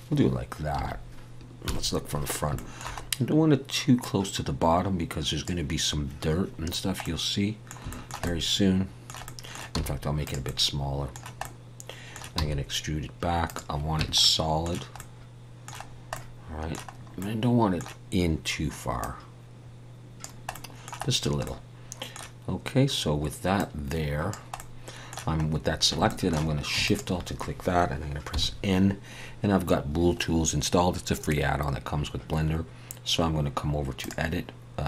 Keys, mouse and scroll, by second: 1.6 KP_1, 2.5 shift+middle click, 3.0 scroll up 1, 4.0 click, 4.0-4.7 scroll up 1, 6.8 scroll down 1, 7.0 middle click, 7.9 shift+middle click, 9.2 middle click, 9.7 s, 10.4 middle click, 12.4 e, 14.0 Tab, 14.2 middle click, 15.9-17.0 scroll down 2, 16.1 middle click, 17.0-17.6 scroll up 2, 17.2 middle click, 19.0 click, 20.5 middle click, 21.1-21.4 scroll down 2, 21.4 middle click, 24.1 click, 24.6 middle click, 26.1 shift+middle click, 26.8 shift+click, 28.3 n, 34.0 click.